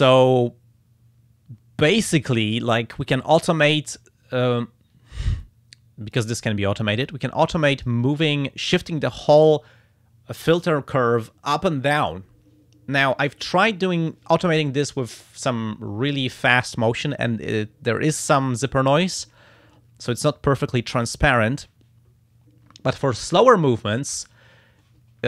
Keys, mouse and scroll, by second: 5.4 click, 7.1 click, 8.1 click.